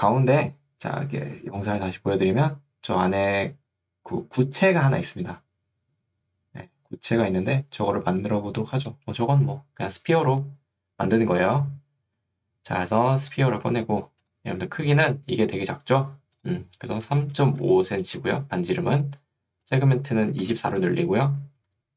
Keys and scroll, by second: 17.2 3, 17.6 5, 18.2 Return, 20.6 4.